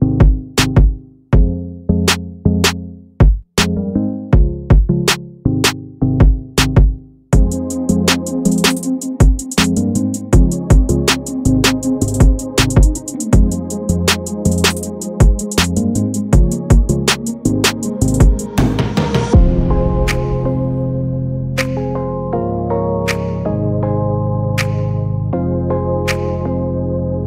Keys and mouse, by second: 0.7-1.5 drag, 2.4 g, 7.7 click, 8.2-8.7 shift+middle drag, 9.3 click, 9.8 Tab, 10.6 s, 12.7 Tab, 13.3 click, 13.8-14.3 shift+middle drag, 14.9-16.1 middle drag, 16.8 click, 17.8 g, 19.6 KP_1, 20.0 click, 20.6 middle click, 21.1 shift+a, 23.5-23.9 middle drag, 24.8 Tab, 25.2 s.